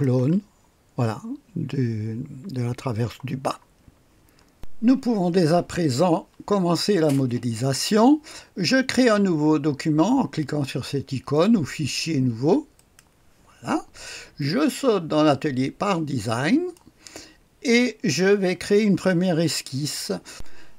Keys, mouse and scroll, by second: 0.2-1.9 scroll down 1, 4.5-13.2 drag, 15.2-17.0 drag, 20.3 click.